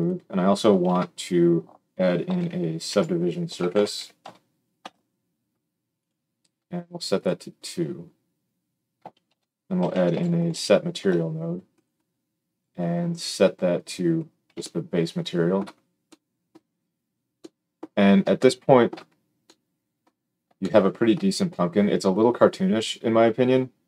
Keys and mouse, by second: 0.1-7.1 middle drag, 0.8 shift+a, 7.1-11.8 drag, 9.2 shift+a, 11.8-12.4 middle drag, 12.4-23.8 drag.